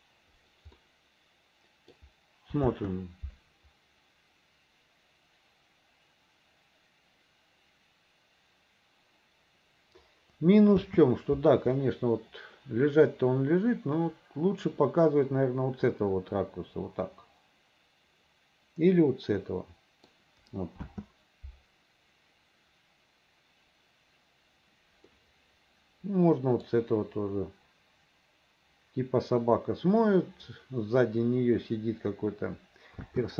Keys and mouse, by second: 0.9-2.0 drag, 2.8 space, 10.9 space, 11.9-20.2 middle drag, 20.9 space, 25.2-26.8 middle drag, 33.1 space.